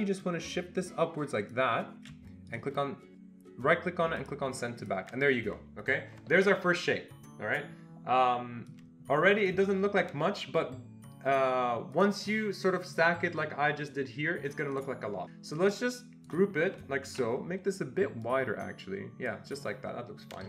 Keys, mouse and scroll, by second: 0.2-4.8 shift+drag, 2.5 right click, 4.8 click, 8.7-12.9 drag, 12.9-14.8 drag, 14.8 click, 15.2 click, 15.6 click, 20.4 ctrl+g.